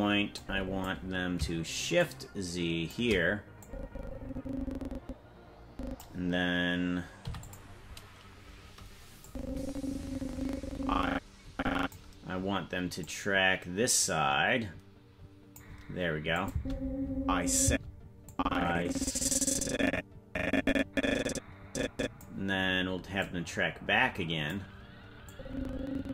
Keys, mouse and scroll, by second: 0.4 click, 2.0 shift+click, 3.6-6.0 drag, 7.2 i, 9.2-11.9 drag, 13.0-15.6 drag, 16.3 click, 16.5 space, 17.6 space, 18.3-22.2 drag, 23.2-24.5 drag, 25.3-26.1 drag.